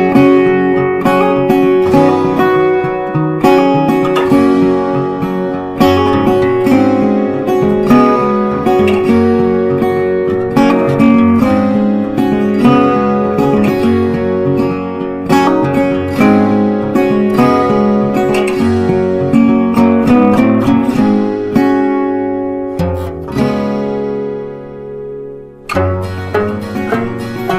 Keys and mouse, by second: 1.8 click, 4.2 click, 10.9-27.5 drag.